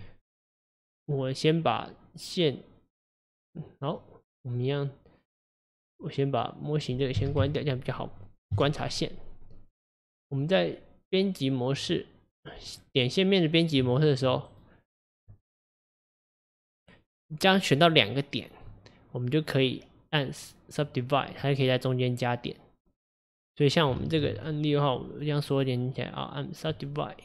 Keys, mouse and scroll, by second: 4.3 click, 6.9-8.6 drag, 8.6 KP_Divide, 9.6 click, 12.7 click, 14.1 shift+click, 14.5 right click, 17.8 click, 18.1 click, 19.6 right click, 21.5-24.0 middle drag, 24.0 ctrl+z, 24.5 middle click, 25.0 click, 25.5 right click.